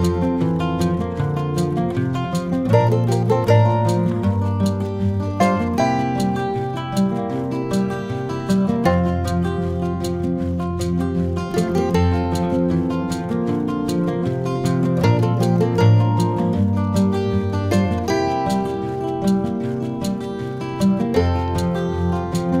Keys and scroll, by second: 0.7 ctrl+KP_Add, 15.3 ctrl+-, 18.5 ctrl+z, 18.8 ctrl+c, 19.0 ctrl+v.